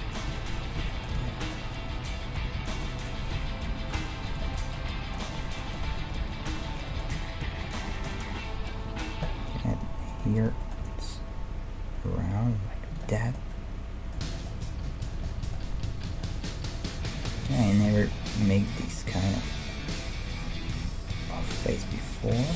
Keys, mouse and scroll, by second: 0.8 f, 1.2 a, 2.3 middle click, 2.4-4.8 right drag, 3.4 f, 4.0 ctrl+Tab, 4.8 middle click, 5.4 right click, 5.6-8.6 middle drag, 7.4-8.9 drag, 7.4-8.4 right drag, 8.2 a, 9.3 middle click, 9.7 right click, 10.8 g, 11.9 middle click, 13.2-17.0 middle drag, 14.6-17.0 drag, 15.8 g, 17.6-21.4 middle drag, 20.5-21.6 right drag, 20.7 g, 21.6-22.5 middle drag.